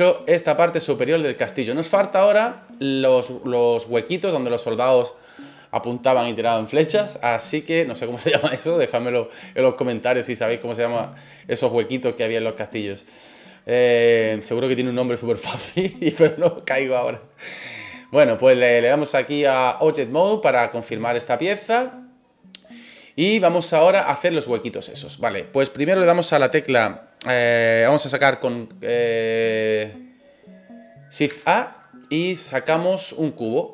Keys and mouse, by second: 18.7-19.9 drag, 20.4-20.8 middle drag, 24.0-25.0 middle drag, 31.2 shift+a.